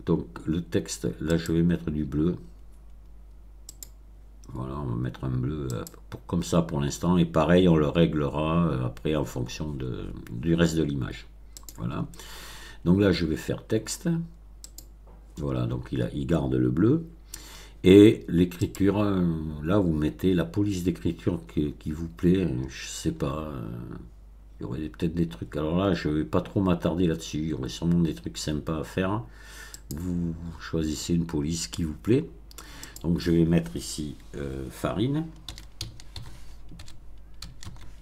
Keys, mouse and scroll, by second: 1.3 click, 3.6 click, 5.6 click, 11.5 click, 14.6 click, 18.5 click, 20.5 scroll down 1, 21.5-23.8 scroll down 8, 24.4-24.7 scroll down 2, 25.3-26.0 scroll down 4, 29.7 click, 32.8 click, 35.4-37.6 typing.